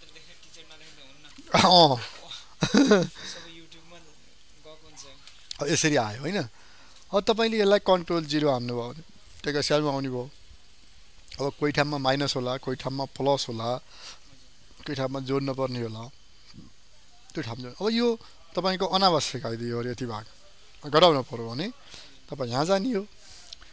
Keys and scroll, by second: 8.3 ctrl+0.